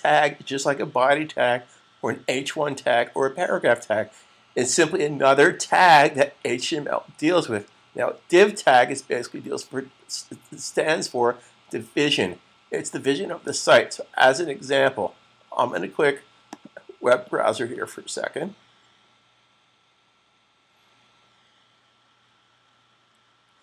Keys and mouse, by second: 16.3 click.